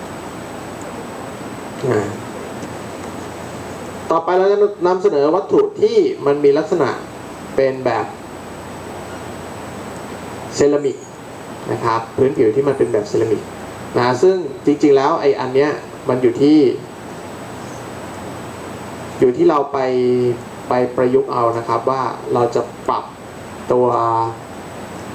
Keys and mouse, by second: 2.1-6.2 drag, 6.2-6.7 middle drag, 16.4-17.7 middle drag.